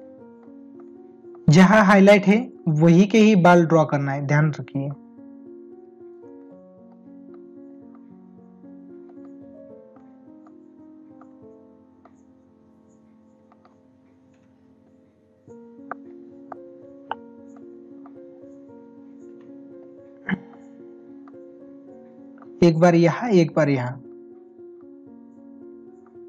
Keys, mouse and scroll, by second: 6.2 space, 8.2 right click, 9.1 ctrl+alt+z, 13.5 ctrl+alt+z, 15.3 ].